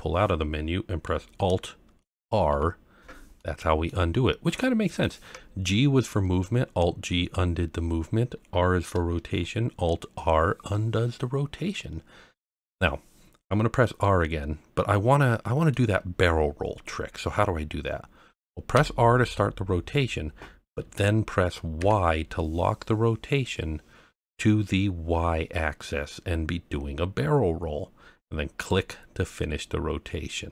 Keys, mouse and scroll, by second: 2.2 alt+r, 3.4-3.9 middle drag, 4.1-4.6 scroll up 2, 4.6 middle click, 10.7-11.4 scroll down 1, 11.4 scroll up 1, 12.2-12.6 scroll down 1, 14.8-15.7 middle drag, 19.5 r, 22.6 y, 28.6 click, 29.3-30.5 middle drag.